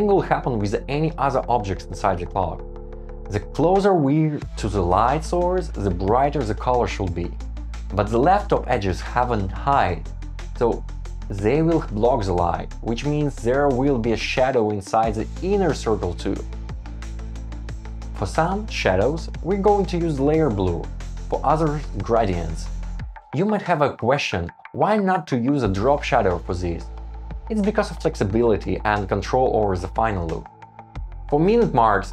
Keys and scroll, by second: 1.5 Escape, 5.3 super+c, 6.2 Return, 7.8 shift+Up, 7.9 Down, 8.1 shift+Up, 10.1 shift+Up, 11.0 shift+Down, 13.1 Return, 16.1 shift+Up, 16.7 super+z, 17.6 shift+Up, 18.0 shift+Down, 18.8 Up, 19.4 Down, 19.5 shift+Up, 20.0 shift+Down, 26.5 super+s, 31.0 Down, 31.1 Tab, 31.3 shift+Up, 31.5 Down.